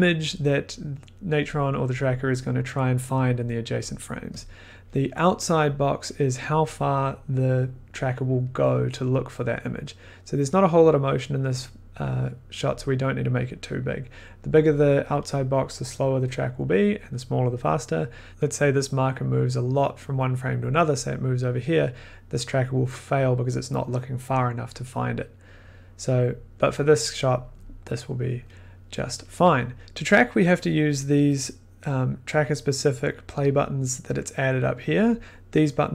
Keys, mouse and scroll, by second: 4.4 click, 4.4 scroll, 5.0 middle click, 12.4-17.1 drag.